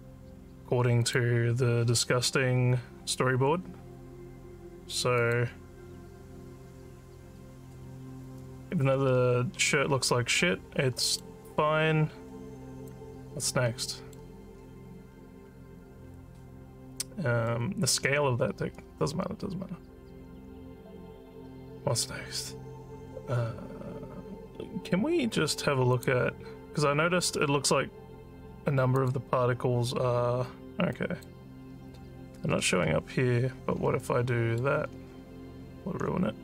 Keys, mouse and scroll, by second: 1.0 click, 2.2 scroll down 2, 3.4 scroll down 1, 5.2 click, 9.3-11.2 alt+middle drag, 11.5-12.9 alt+drag, 13.5 alt+middle click, 14.6-15.1 alt+scroll up 7, 16.0 alt+scroll down 4, 17.5 alt+middle click, 26.0 click, 29.0 click, 30.9 click, 32.5 scroll up 1, 34.0 alt+middle click.